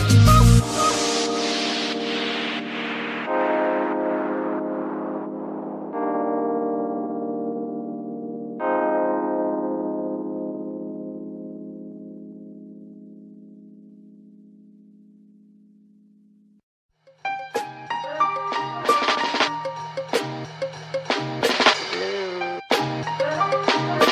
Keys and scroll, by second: 1.8 r, 2.1 x, 3.0 Escape, 3.7 r, 3.9 y, 5.8 z, 6.3 g, 6.5 x, 8.0 Escape, 10.4 shift+g, 10.6 x, 12.4 alt+r, 15.0 r, 20.7 alt+g, 21.6 alt+g, 21.8 alt+x.